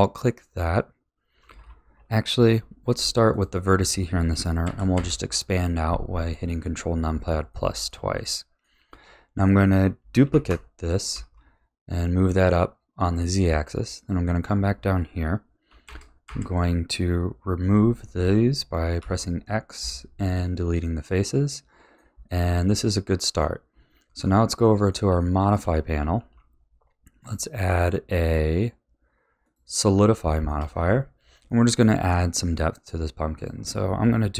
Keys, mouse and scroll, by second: 2.4 1, 3.3 click, 4.6 ctrl+KP_Add, 4.9 ctrl+KP_Add, 7.5-10.3 middle drag, 10.3 shift+d, 13.4 a, 13.9 click, 15.8 ctrl+KP_Add, 16.2 ctrl+KP_Add, 19.0 x, 20.4-23.7 middle drag, 23.7 Tab, 24.6-26.2 middle drag, 26.2 ctrl+s, 27.2 click, 27.5-30.2 drag, 30.2-30.7 shift+middle drag, 30.7-31.1 scroll up 4, 31.1-31.4 scroll down 1, 31.4-33.4 middle drag, 33.4-34.3 drag.